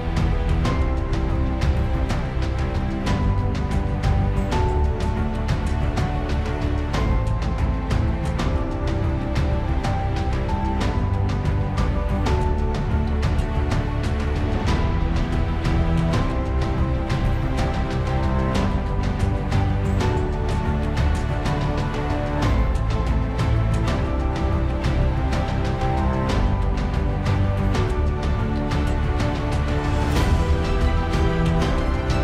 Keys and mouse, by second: 0.5 alt+middle click, 4.0 ctrl+z, 7.5 KP_Decimal, 7.8 Return, 9.5 KP_1, 13.7 ctrl+z, 14.3 KP_0, 16.3 KP_0, 16.4 Return, 22.1 alt+middle click, 24.8 ctrl+s, 26.3 alt+middle click, 27.3 ctrl+s, 28.2 space, 30.1 space, 31.3 space.